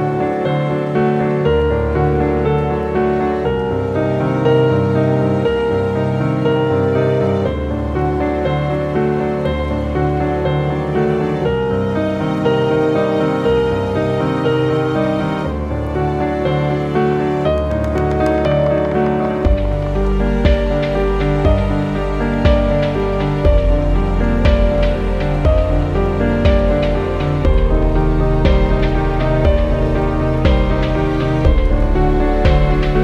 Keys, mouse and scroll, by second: 5.6 click, 6.6-7.5 scroll up 1, 9.7 click, 14.1 click, 20.6 click, 25.1-25.4 scroll up 1, 25.4 click, 29.0 click, 29.4 click.